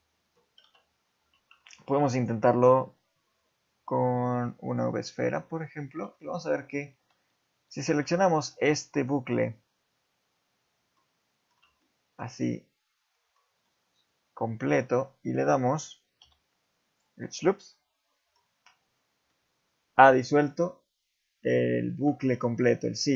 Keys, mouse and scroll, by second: 0.6 KP_7, 1.2 Tab, 1.7 shift+middle click, 2.1 right click, 2.5 shift+a, 5.3 Tab, 5.5 middle click, 5.9 scroll up 2, 6.2 shift+middle click, 7.7 alt+click, 8.2 scroll down 2, 8.6 middle click, 11.0 middle click, 11.8 shift+middle click, 12.7-13.2 scroll up 1, 13.2 scroll down 1, 13.6 middle click, 16.2 x, 17.5 middle click, 19.3 middle click, 20.3 shift+middle click, 22.6 middle click.